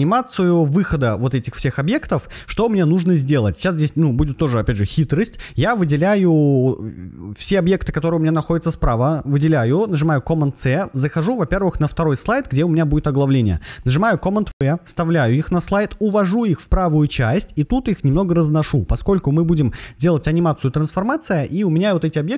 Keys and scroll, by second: 9.8 super+c, 13.7 super+v.